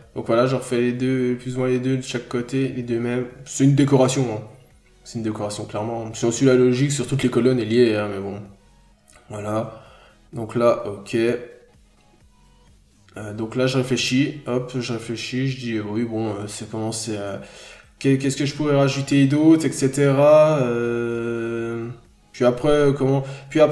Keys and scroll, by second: 1.5 ctrl+z.